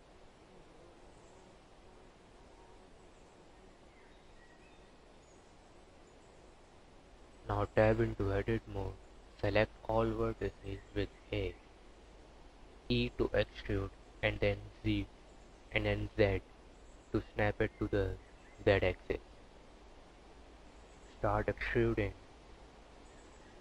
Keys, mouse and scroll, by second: 0.9 KP_4, 1.1 KP_8, 4.8 KP_1, 5.5 scroll up 1, 6.8 Tab, 7.3 a, 10.5 e, 13.5 e, 14.4 s, 18.2 scroll up 1, 18.7 e, 20.1 s, 21.0 e, 22.0 s, 23.1 e.